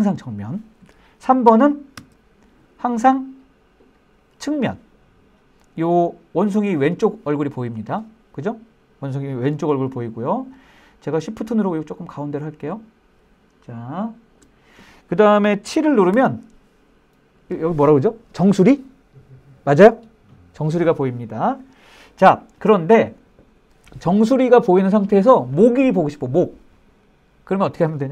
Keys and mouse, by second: 2.1 KP_3, 11.7-14.6 shift+middle drag, 16.3 KP_7.